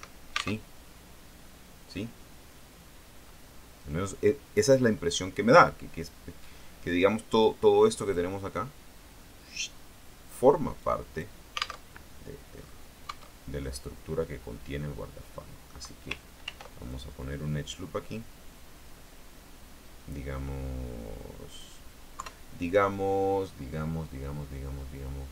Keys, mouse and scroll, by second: 0.0 Escape, 0.8 alt+Tab, 6.7 middle click, 7.5 click, 10.9 click, 12.0 alt+Tab, 12.7-13.1 scroll up 2, 13.2 Tab, 13.7-16.0 middle drag, 16.6 ctrl+r, 17.0 ctrl+click, 21.7 click, 22.3 KP_3, 23.9 scroll down 2.